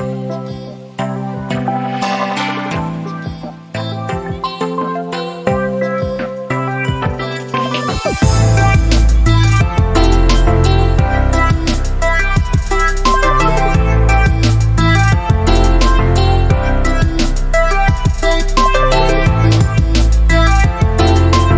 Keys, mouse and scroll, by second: 3.4-4.4 alt+shift+drag, 6.2 space, 6.4 click, 6.7 space, 7.7-8.6 drag, 9.1 right click, 10.4-11.0 drag, 12.0-12.6 alt+shift+click, 13.6 space, 13.9 click, 18.3 typing.